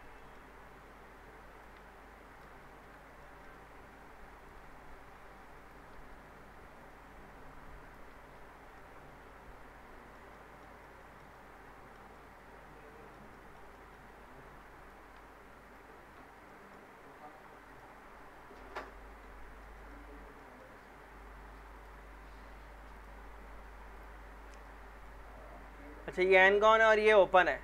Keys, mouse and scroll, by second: 0.2 middle click, 0.5-1.5 scroll up 1, 1.5 click, 2.3 ctrl+click, 2.6 ctrl+shift+e, 3.2 middle click, 3.6-4.4 scroll up 1, 4.4 click, 5.6 ctrl+click, 5.9 ctrl+shift+e, 6.8 click, 7.8 ctrl+click, 8.1 ctrl+shift+e, 8.4 scroll down 1, 8.8-10.3 alt+middle drag, 10.8-12.0 alt+middle drag, 14.1-14.8 scroll up 1, 14.8 click, 15.6 ctrl+click, 15.9 ctrl+shift+e, 16.1 scroll down 1, 16.5 middle click, 16.9-17.7 scroll up 1, 17.7 click, 18.7 ctrl+click, 19.0 ctrl+shift+e, 19.3 scroll down 1, 19.6 alt+middle click, 20.1 scroll up 1, 20.4 alt+middle click, 21.7 click, 24.7-25.2 alt+middle click, 25.3 scroll up 1, 27.2 click.